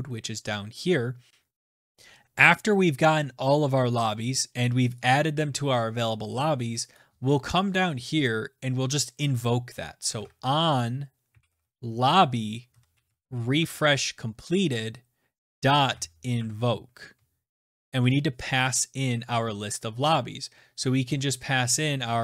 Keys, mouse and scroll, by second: 3.2-4.7 scroll, 5.4 click, 5.6 click, 7.4 click, 8.1 Return, 8.2 Return, 10.3-14.2 typing, 16.0-17.4 typing, 18.8-19.6 typing.